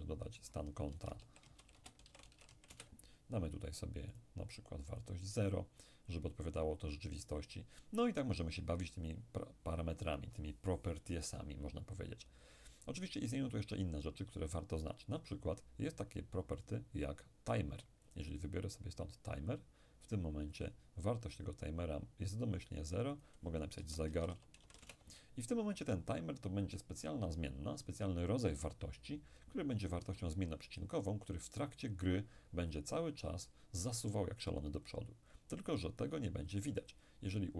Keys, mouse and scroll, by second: 0.9-2.5 typing, 2.7 Return, 4.2 click, 16.6 click, 18.1 click, 19.4 click, 23.2 click, 23.8-24.8 typing, 24.8 Return.